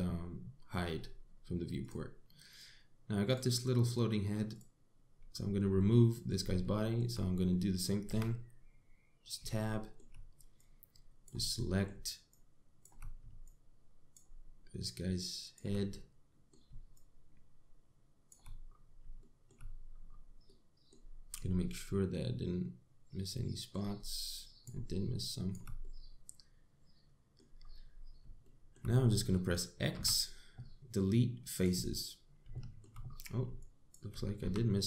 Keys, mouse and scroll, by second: 2.4 click, 3.9 click, 5.2 click, 6.0-6.4 scroll up 3, 6.4 middle click, 7.2 shift+middle click, 8.1 middle click, 8.7 Tab, 10.3 middle click, 11.2 click, 12.2 middle click, 12.9 shift+click, 14.1 click, 15.4 shift+click, 16.6 middle click, 17.6 shift+click, 19.3 scroll up 3, 19.8 shift+middle click, 20.3-21.1 scroll up 7, 21.1 middle click, 21.6-22.2 scroll down 8, 22.2 middle click, 24.6 shift+click, 25.8 shift+click, 26.4 middle click, 28.3-28.7 scroll down 7, 29.1 shift+middle click, 29.6 scroll up 3, 30.1 middle click, 30.6 x, 33.2 shift+middle click, 33.7 scroll up 4, 34.2 shift+click.